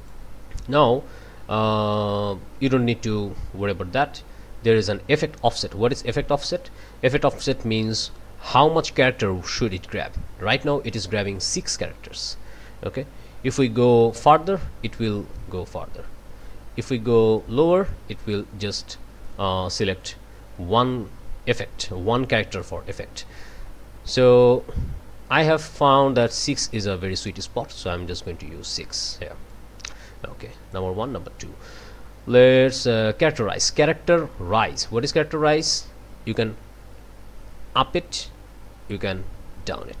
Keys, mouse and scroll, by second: 12.2-28.0 drag, 29.5-30.9 drag, 35.7-40.0 drag.